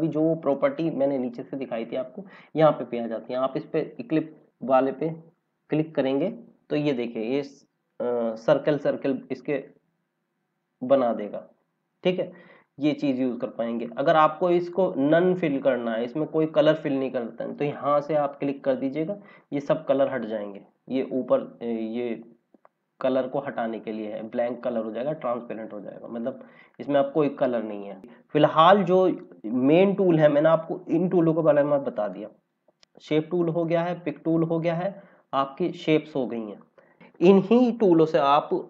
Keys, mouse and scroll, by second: 5.5 click, 8.1 click, 25.6 click, 28.0 scroll down 1, 32.4 click, 35.2 click, 36.9 scroll up 1.